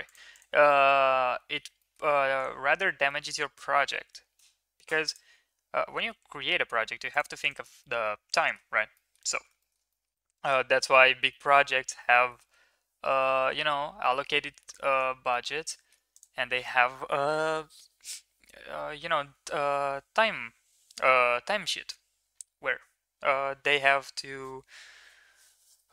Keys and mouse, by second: 0.3 middle drag, 0.6-1.5 middle drag, 1.7 middle click, 3.0 middle click, 3.6 g, 6.0 g, 7.4 click, 7.7-8.5 middle drag, 8.7 ctrl+s, 8.9 middle drag, 9.6 shift+middle drag, 9.9 middle drag, 10.4 click, 10.6 Tab, 11.0 shift+middle click, 11.3 middle click, 12.1 middle click, 13.6 Tab, 14.0 middle drag, 14.8 ctrl+s, 15.3 middle click, 15.6 shift+middle click, 16.1 click.